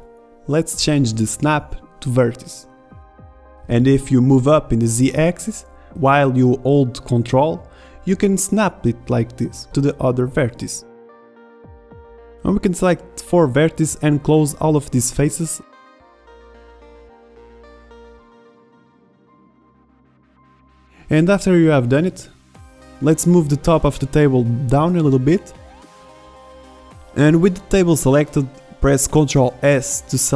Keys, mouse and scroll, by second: 5.8 e, 11.3-12.3 middle drag, 13.3 f, 15.3 f, 15.4 a, 15.5 middle drag, 15.7 middle drag, 17.2 middle click, 18.2 e, 18.7 middle click, 19.4 click, 19.7 ctrl+z, 20.8 f, 21.3 a, 21.4-21.8 middle drag, 22.4 z, 22.6 z, 22.7 Tab, 23.4 Tab, 23.8 a, 23.9 b, 24.1 a, 24.2 b, 24.8-26.0 drag, 26.9 Tab, 29.0 ctrl+z, 29.1 shift+a.